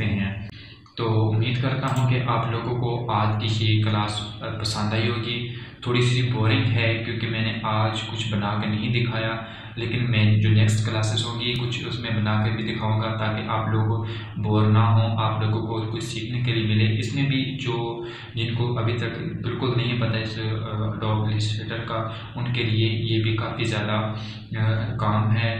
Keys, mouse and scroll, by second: 3.6 click.